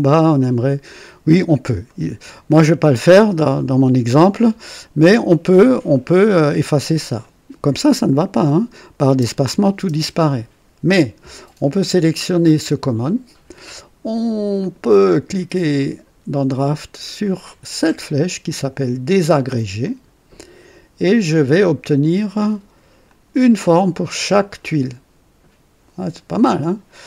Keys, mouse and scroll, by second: 1.2 scroll down 2, 1.8-2.6 right drag, 4.6 scroll up 1, 6.9 click, 9.0-9.8 typing, 14.5 click, 15.7 click, 19.8 click, 23.0-26.6 drag.